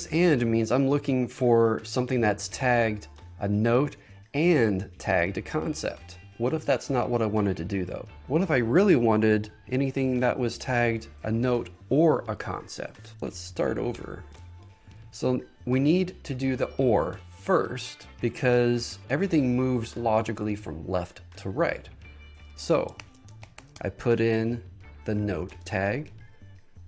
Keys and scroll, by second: 13.5 shift+super+BackSpace, 14.3 shift+super+BackSpace, 23.1 shift+3, 25.6 Return.